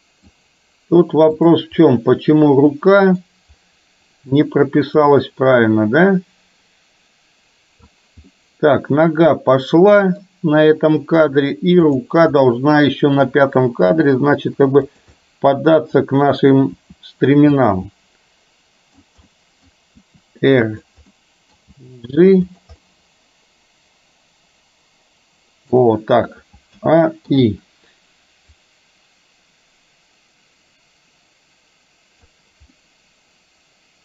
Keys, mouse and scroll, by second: 1.9-3.4 middle drag, 6.1-7.9 drag, 8.4-10.3 middle drag, 12.5-13.3 middle drag, 13.9 g, 15.3 middle click, 15.3 scroll up 1, 16.8 r, 18.0-19.1 middle drag, 19.3 middle click, 19.3-19.6 scroll up 1, 20.1 r, 21.3 middle click, 21.8 g, 22.9-25.9 middle drag, 26.9 a, 27.4 i, 28.6-32.5 drag, 32.8-34.0 middle drag.